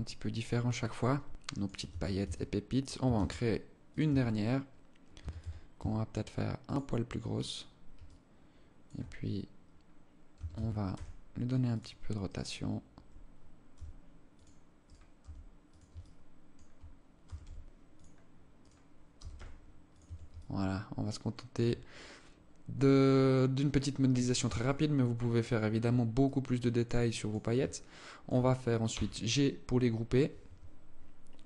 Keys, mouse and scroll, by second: 0.2 alt+click, 1.4 Tab, 1.7 Tab, 2.6 shift+d, 3.6 Tab, 4.7 a, 4.9 a, 5.2 s, 6.8 right click, 7.6 alt+click, 9.9 a, 10.1 a, 10.4 r, 11.8 right click, 13.3 g, 14.4 right click, 14.7 g, 15.5 alt+click, 16.8 g, 18.1 right click, 18.7 g, 19.6 Tab, 20.0 alt+click, 21.3-22.0 scroll down 9, 21.8-22.4 scroll up 6, 22.4-23.2 scroll down 3, 24.2 shift+right click, 24.8 shift+right click, 25.8 alt+click, 26.6 alt+click, 27.2 alt+click, 28.4 g.